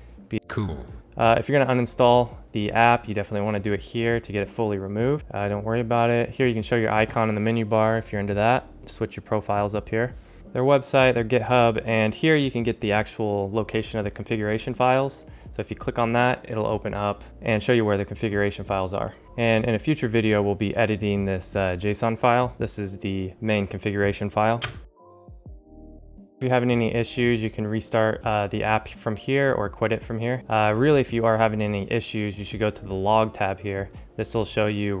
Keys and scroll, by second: 24.8 shift+space, 26.2 shift+space.